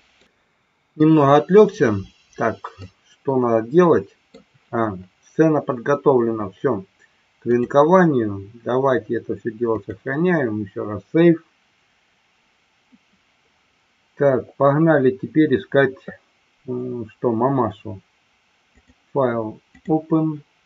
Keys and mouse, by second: 2.9-4.3 middle drag, 7.4-12.5 drag, 18.8-20.0 drag.